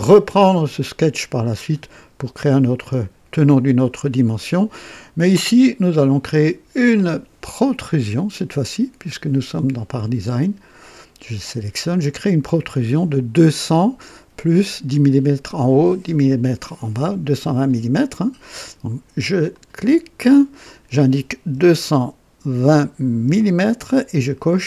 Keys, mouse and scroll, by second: 4.3 click, 6.2 click, 11.1 click, 19.5 click, 21.5 KP_2, 22.5 KP_2, 23.2 KP_0.